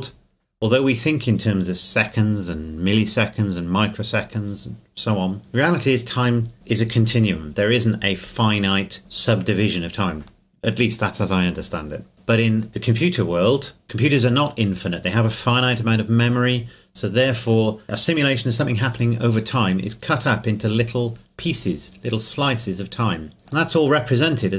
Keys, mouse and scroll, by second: 22.8 scroll down 1, 23.0-23.5 scroll up 1, 23.5 click, 24.3-24.5 scroll down 1.